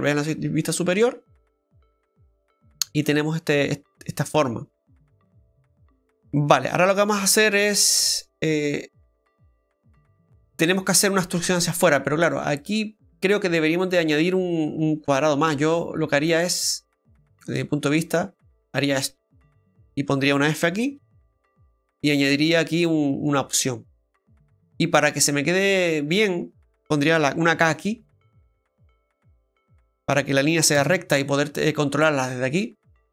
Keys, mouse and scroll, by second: 1.0 shift+middle click, 1.6 scroll up 1, 4.0 middle click, 6.0-6.5 scroll down 4, 6.5 middle click, 7.0 scroll up 2, 7.6-7.9 scroll up 1, 8.0 shift+middle click, 8.5-9.0 scroll up 1, 9.0 scroll down 1, 12.2-15.3 scroll up 1, 16.2 click, 17.0 right click, 17.9 shift+right click, 21.0 f, 22.0 middle click, 25.7 middle click, 31.3 right click.